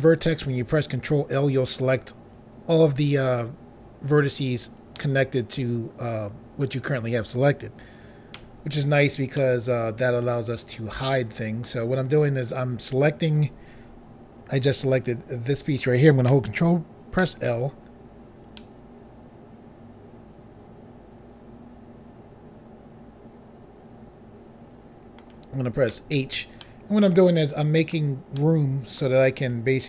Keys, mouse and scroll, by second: 4.9 middle click, 8.3 h, 9.3 middle click, 12.5 click, 17.2 ctrl+l, 18.5 middle click, 25.9 h, 26.6 middle click, 28.4 middle click.